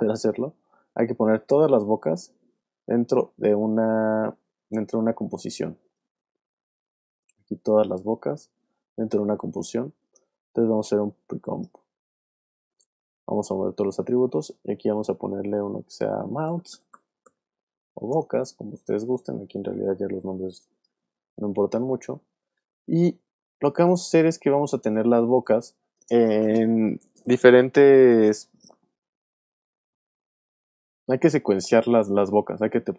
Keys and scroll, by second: 16.2-17.8 typing, 18.1 Return, 24.4 space.